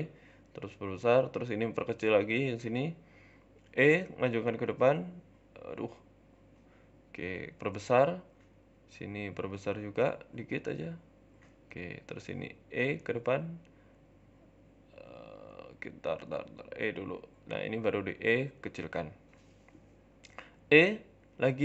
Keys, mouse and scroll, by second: 0.6 shift+middle click.